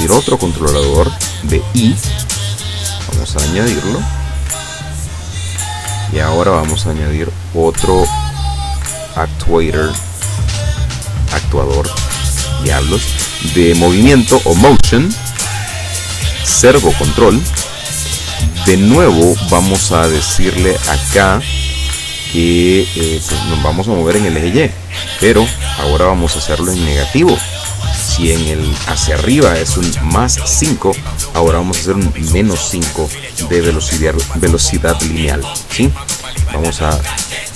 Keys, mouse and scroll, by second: 1.1 click, 3.0-4.1 drag, 5.1 click, 6.9-11.4 drag, 15.2 click, 15.6 click, 16.4 click, 17.7 scroll down 1, 18.7 scroll up 2, 19.7 click, 20.8 click, 21.3 click, 24.0 click, 26.3 KP_Subtract, 26.8 KP_5, 27.2 KP_Enter, 37.2 click.